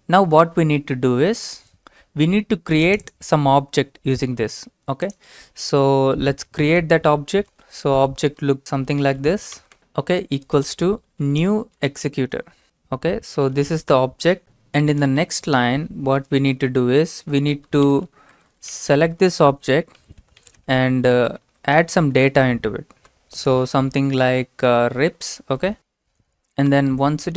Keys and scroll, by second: 6.1 Return, 7.5-13.9 typing, 15.0 Return, 16.2-24.3 typing, 25.6 typing, 26.7 Return.